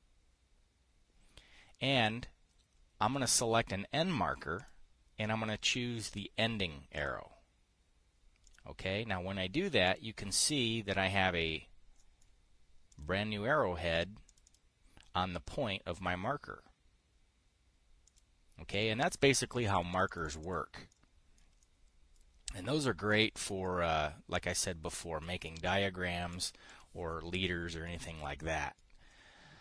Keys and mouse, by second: 7.6 click, 9.0 right click, 11.0 click, 12.5 click, 13.4 right click, 14.8 right click, 18.6 click, 19.2 click, 20.1 click, 20.5 click, 20.8 click, 21.5 click, 22.0 middle click, 22.1 click, 23.6 click, 26.1 right click, 26.8 click, 27.2 click, 28.4-29.4 drag.